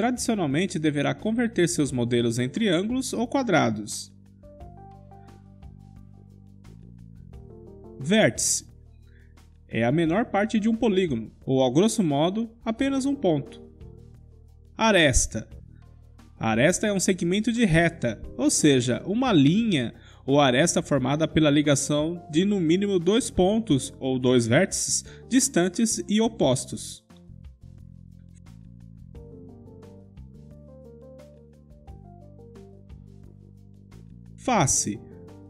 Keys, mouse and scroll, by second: 1.4 Tab, 2.1-5.8 middle drag, 5.4 KP_Decimal, 5.8 1, 6.9-8.9 middle drag, 9.3-12.2 drag, 15.4 2, 23.2-24.2 middle drag, 24.2 click, 24.4 middle click, 25.2 KP_5, 25.9-28.8 middle drag, 29.8 KP_Decimal, 30.5 middle click, 31.3-32.4 drag, 34.4 middle click, 35.3-35.4 drag.